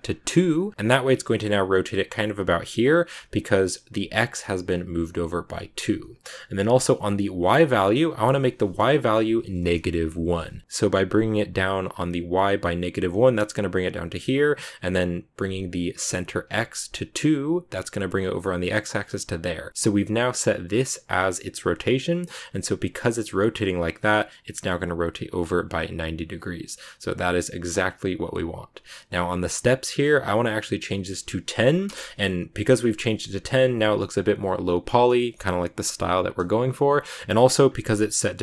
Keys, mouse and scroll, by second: 7.7-10.6 drag, 30.1-34.0 drag, 37.4-38.4 scroll up 2.